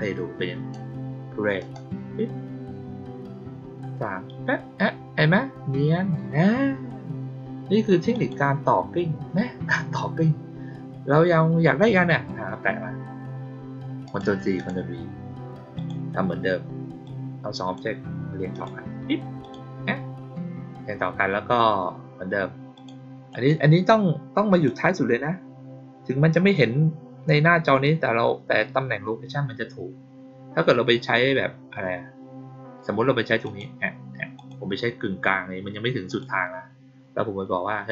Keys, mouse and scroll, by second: 1.5 click, 8.0 click, 11.7 click, 14.0 click, 14.5 click, 15.7 click, 17.0-17.7 drag, 18.4 click, 19.3 click, 22.7 click, 23.2 right click, 24.4 click, 33.4 click, 34.3 click, 36.0 click.